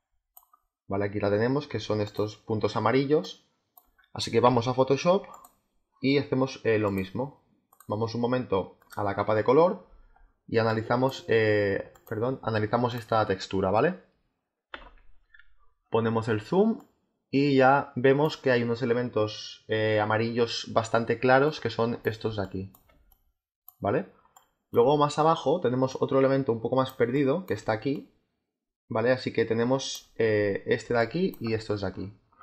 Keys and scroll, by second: 5.4 space, 14.6 z, 22.1 space, 24.7 space, 26.8 space, 30.8 space.